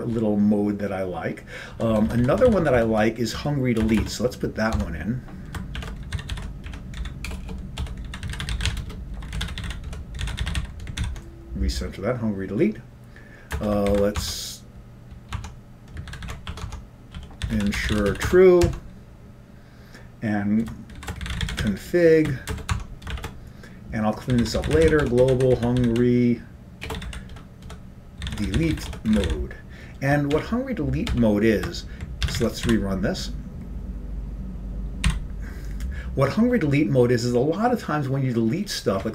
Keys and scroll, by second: 2.8 Down, 3.4 Down, 3.4 Left, 4.0 Return, 5.8-10.5 typing, 11.7 ctrl+l, 11.7 typing, 14.1-14.8 typing, 16.7 Tab, 16.7 ctrl+g, 16.7 Home, 17.0 Tab, 17.3 End, 17.6 typing, 18.9 Return, 18.9 Tab, 18.9 typing, 21.1-31.3 typing, 22.8 Return, 22.9 Tab, 32.5 ctrl+c, 33.0-33.7 typing, 35.2 typing.